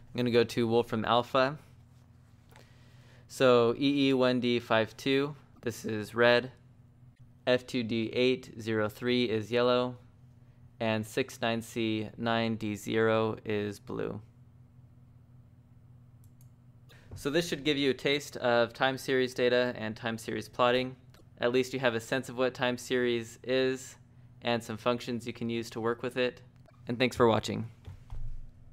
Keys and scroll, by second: 0.0-0.3 typing, 1.5-3.8 typing, 6.4-12.1 typing, 14.0-14.9 typing, 17.8 Escape, 17.9 Escape.